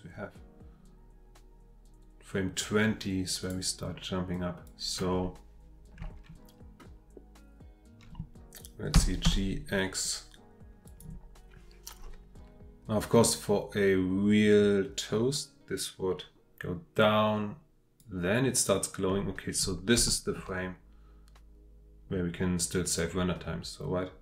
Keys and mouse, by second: 4.3-4.8 drag, 8.9 g, 9.3 x, 10.9 click, 15.3-18.0 drag, 20.1 shift+middle drag.